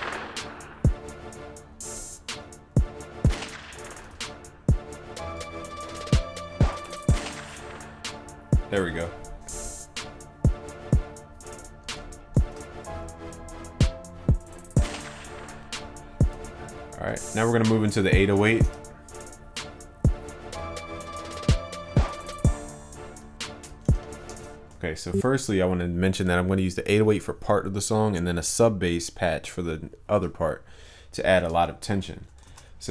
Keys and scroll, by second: 4.1 ctrl+s, 12.4 ctrl+s, 22.9 alt+Down, 32.5 ctrl+s.